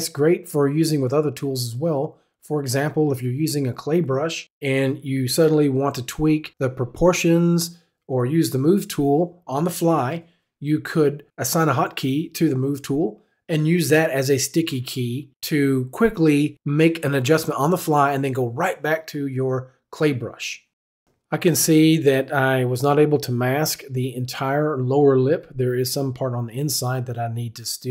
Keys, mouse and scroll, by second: 0.7 right click, 0.8 click, 1.8 click, 6.9 click, 9.4 click, 10.6 click, 12.1 click, 14.0 click, 15.9 click, 18.3 click, 23.4-23.7 right drag, 24.9 right click, 25.6 click.